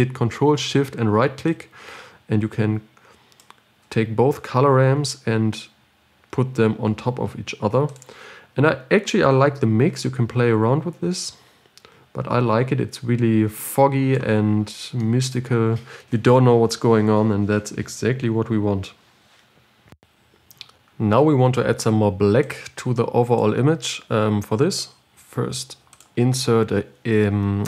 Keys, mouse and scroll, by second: 4.1 ctrl+shift+right click, 6.3-7.1 scroll down 2, 7.1-8.2 scroll up 6, 8.2-15.0 drag, 15.0-15.4 scroll down 9, 15.4-20.2 middle drag, 20.2 ctrl+shift+click.